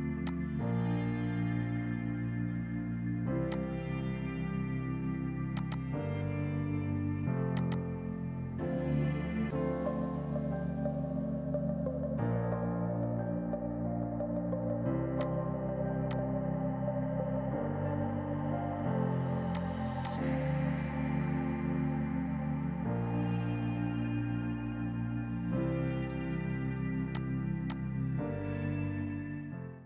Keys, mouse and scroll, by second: 2.7 space, 3.0 F3, 3.4 click, 3.7 right click, 5.5 click, 6.4 KP_7, 6.6 KP_0, 6.9 KP_Enter, 7.5 click, 7.7 KP_1, 7.9 KP_0, 8.1 KP_Enter, 9.4 space, 14.8 z, 15.1 click, 15.6 right click, 16.0 click, 16.9 right click, 17.5 F4, 18.6 click, 19.1 space, 19.4 click, 22.1 F8, 22.5 Page_Up, 23.4-25.8 typing, 26.4 Down, 27.1 click, 27.3 right click, 27.6 click, 28.9 right click.